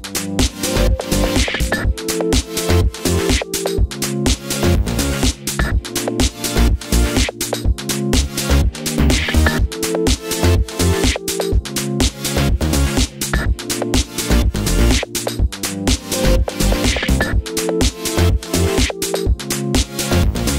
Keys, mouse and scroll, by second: 0.0-3.3 middle drag, 1.6 t, 3.3 click, 3.4-8.4 middle drag, 4.7 scroll down 1, 7.0-7.6 scroll down 2, 8.0 g, 8.4 click, 8.5-15.4 middle drag, 9.5 g, 11.3 g, 15.4 shift+click, 15.8 ctrl+j, 16.2 middle click, 16.6 click, 16.8-19.2 middle drag, 19.2 click.